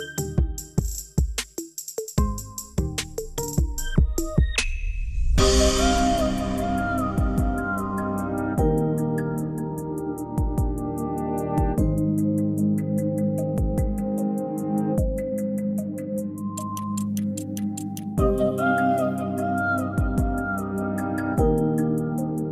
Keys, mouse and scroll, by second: 0.0 click, 1.0 click, 1.8 g, 3.3 click, 3.8-5.0 scroll down 6, 5.0 g, 6.8 scroll down 3, 7.0 click, 10.7-16.3 drag, 18.8-22.5 scroll up 2.